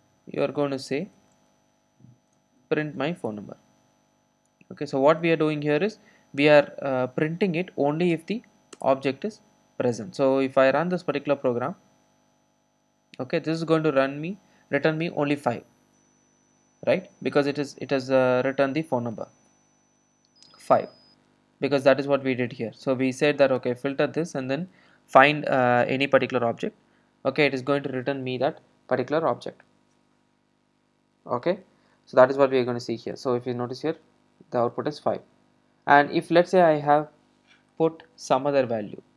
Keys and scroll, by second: 1.2 Tab, 4.4 super+z, 8.1 alt+Return.